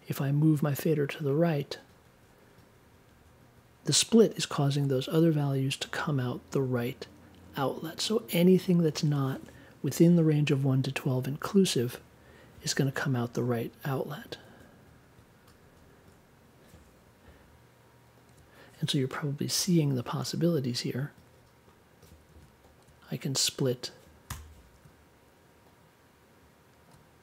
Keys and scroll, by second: 24.2 BackSpace.